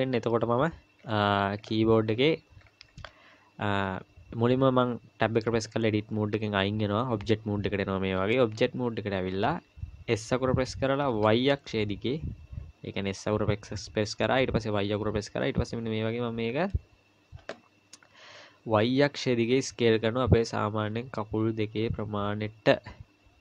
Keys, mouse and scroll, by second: 1.0-1.6 scroll down 4, 1.6-2.6 scroll up 8, 2.6 scroll down 1, 2.7-4.2 scroll down 1, 5.5 Tab, 10.1 s.